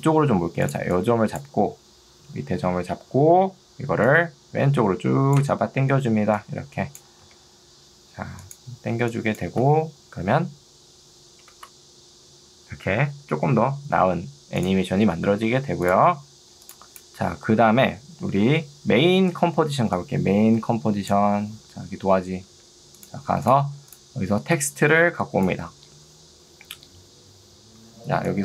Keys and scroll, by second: 6.3 ctrl+2, 7.3 Escape, 9.5 space, 19.8 ctrl+2, 22.6 Escape, 28.0 ctrl+2.